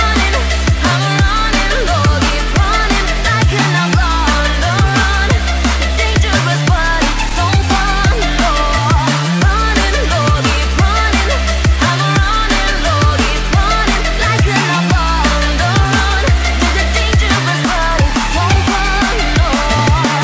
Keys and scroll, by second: 1.8 ctrl+alt+shift+e.